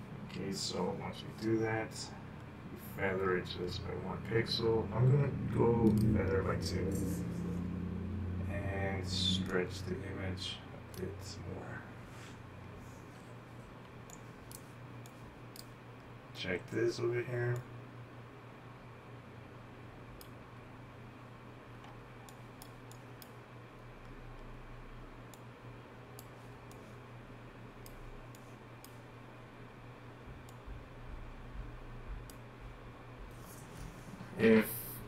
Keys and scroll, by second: 13.9-15.3 typing, 22.0-23.5 typing, 25.3 typing, 27.0-28.3 typing, 30.7 typing.